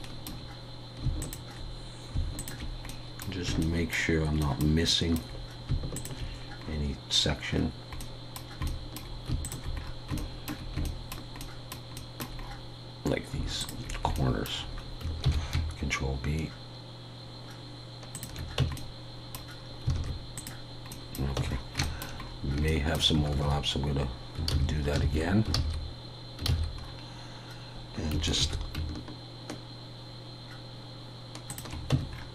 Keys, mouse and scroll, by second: 1.2 alt+shift+click, 2.9 middle click, 3.6 shift+middle click, 4.9 middle click, 5.9 alt+shift+click, 6.6-7.5 scroll up 4, 7.5 scroll down 1, 7.6-8.0 scroll down 3, 8.0 middle click, 8.6 shift+middle click, 9.4 alt+shift+click, 9.8 scroll down 1, 10.2 shift+middle click, 11.0 shift+middle click, 12.4-12.9 scroll up 3, 13.6 alt+shift+click, 14.1 shift+middle click, 15.2 ctrl+b, 18.6 Tab, 18.8 middle click, 19.6 scroll down 2, 19.9 alt+a, 20.3 click, 20.9 middle click, 21.4 Tab, 21.5-22.4 scroll up 5, 21.8 shift+middle click, 22.7 shift+middle click, 23.0 scroll down 1, 23.3 ctrl+z, 25.6 ctrl+z, 26.8 scroll up 1, 28.1 scroll up 2, 28.4 ctrl+b, 31.9 Tab, 32.1 scroll down 1.